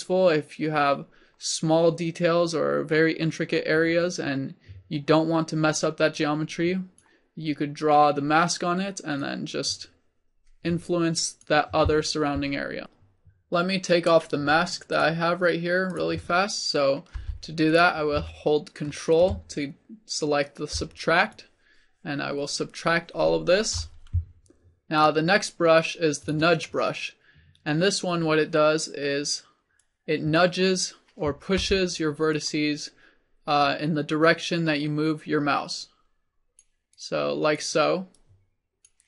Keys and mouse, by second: 17.2 f, 17.8 click, 25.1-27.1 drag, 29.9-34.9 drag, 31.7 f, 35.9-39.0 drag.